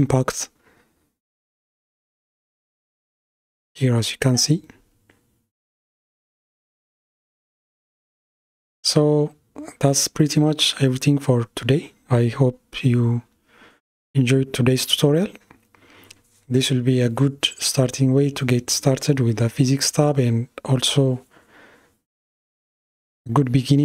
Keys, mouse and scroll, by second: 3.5 click, 4.7-7.7 middle drag, 18.8-21.8 middle drag.